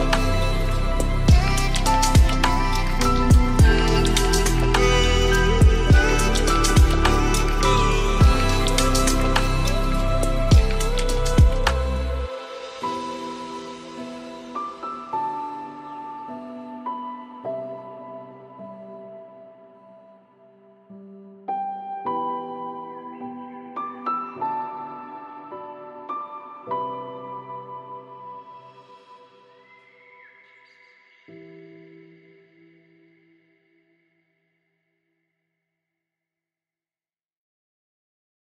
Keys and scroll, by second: 31.6 ctrl+space, 32.4 ctrl+g.